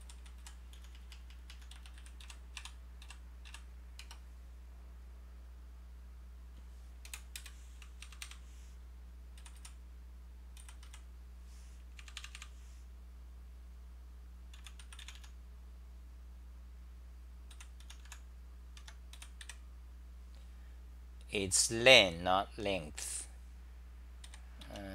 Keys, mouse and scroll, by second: 0.0-2.0 typing, 2.2 Right, 7.0 BackSpace, 7.1 Return, 7.1 super+w, 7.4 shift+super+t, 8.0 super+=, 9.4 g, 9.5 g, 10.6-11.3 typing, 12.0 super+=, 14.5 u, 18.8 Home, 19.2-19.9 typing, 24.3 3.